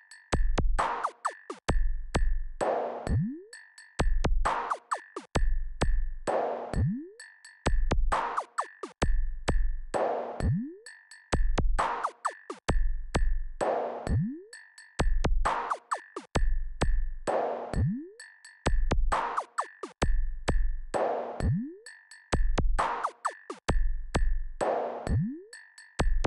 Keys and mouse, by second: 0.5-1.5 drag, 3.5 click, 5.0-6.8 drag, 8.9-13.8 drag, 16.7 click, 20.4 click, 22.3 click, 24.8-26.2 drag.